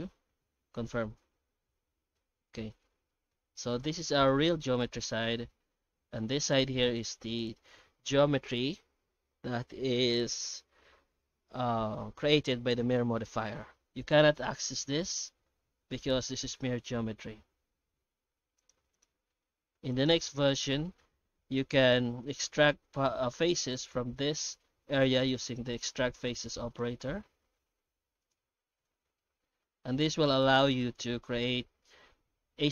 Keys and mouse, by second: 1.4 Tab, 2.5 middle click, 3.1 shift+middle click, 3.6 alt+a, 4.1 1, 4.3 right click, 5.5 Tab, 5.9 Tab, 6.2 middle click, 17.0 g, 18.9 right click, 19.1 g, 21.4 Tab, 21.9 Tab, 24.9 Tab, 26.8 shift+q.